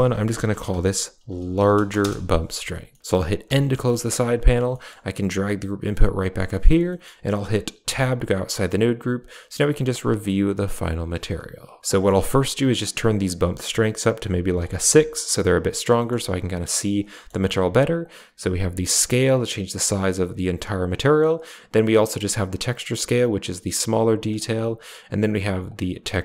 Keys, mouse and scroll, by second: 2.8 middle click, 3.3 n, 3.5 n, 3.8 middle click, 4.3 drag, 4.6 middle click, 4.9 g, 6.4 middle click, 6.7 middle click, 7.7 Tab, 9.8 click, 11.8 middle click, 12.7-14.5 drag, 15.8 middle click, 17.0 middle click, 17.9-20.8 drag, 21.2-24.2 drag, 25.5-26.2 drag.